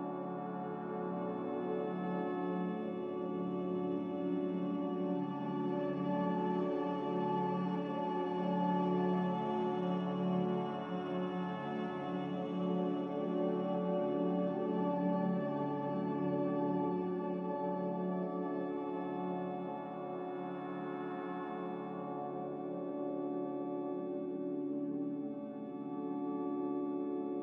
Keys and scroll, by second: 1.1 n.